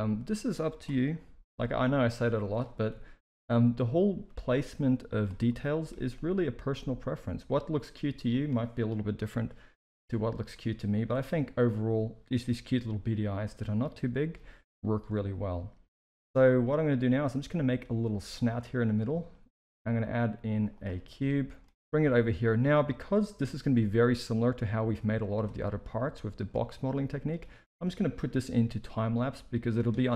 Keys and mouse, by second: 1.1 middle drag, 1.5 g, 2.9 KP_1, 4.2 g, 5.4-5.8 middle drag, 6.1 g, 9.0 KP_1, 9.8 alt+a, 11.3 g, 13.2 s, 14.9 alt+a, 19.2 shift+a, 21.1-21.6 middle drag, 21.9 KP_3, 21.9 g, 23.4 KP_1, 24.5 s, 26.2 shift+middle drag, 26.6-27.2 middle drag, 28.3 KP_3.